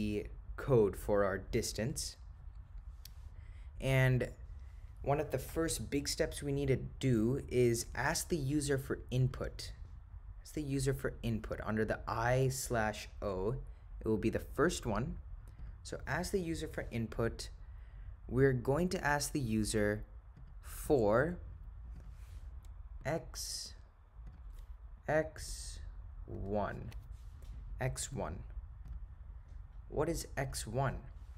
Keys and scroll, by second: 9.3 Right, 15.7 Return, 24.3 0, 25.5 7, 28.2 ., 29.4 0.